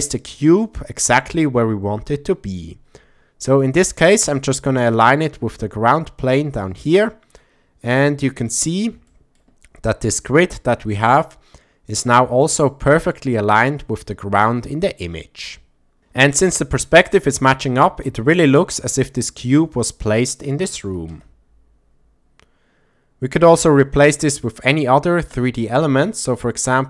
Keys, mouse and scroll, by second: 3.6 shift+middle drag, 4.8-7.4 drag, 8.0-8.5 shift+middle drag, 9.1 shift+middle click, 12.4-13.1 shift+middle drag, 15.5-16.0 shift+middle drag, 17.1 click, 18.1 s, 20.2 click, 20.8 r, 21.1 z, 23.4 click, 25.3 click.